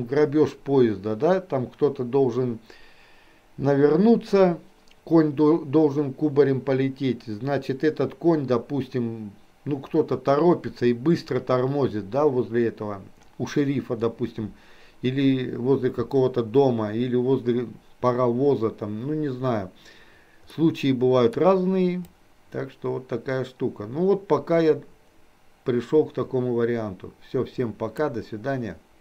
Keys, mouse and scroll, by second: 27.8-29.0 drag.